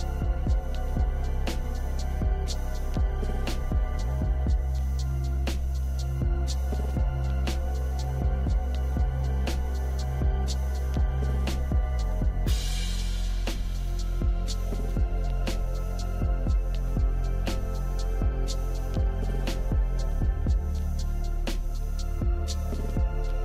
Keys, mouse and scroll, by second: 16.6 click.